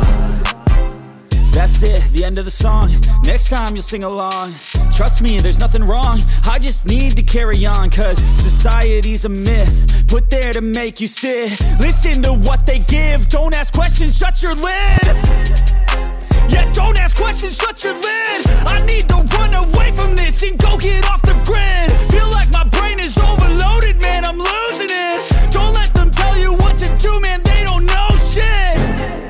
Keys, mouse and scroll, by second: 0.1 scroll down 1, 0.3 click, 0.6 scroll up 1, 0.7 s, 1.1 shift+click, 1.3 middle click, 1.7 click, 2.0-3.4 typing, 2.1 middle click, 2.3 alt+click, 2.8 shift+click, 3.2 click, 3.6 scroll down 1, 3.7 middle click, 4.0 click, 4.3 scroll up 1, 4.6 shift+click, 4.8 click, 4.9 click, 4.9-5.3 scroll down 2, 5.1 shift+middle click, 5.2 ctrl+s, 5.3 click, 5.7 middle click, 5.8 scroll up 1, 5.9 middle click, 6.5 middle click, 6.9 click, 7.0 scroll down 1.